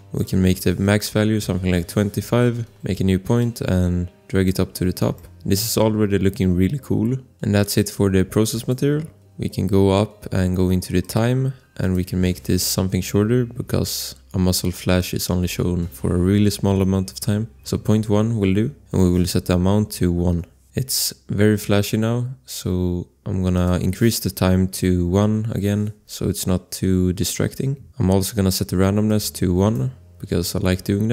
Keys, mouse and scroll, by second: 0.1 scroll, 0.1 click, 1.1-2.0 typing, 2.5 click, 5.6 scroll, 7.5 click, 8.5 click, 13.5 ., 17.4 click, 17.6 1, 17.7 Return, 20.7 scroll, 23.5 click, 25.0 1, 25.1 Return, 27.9 click, 29.0 click.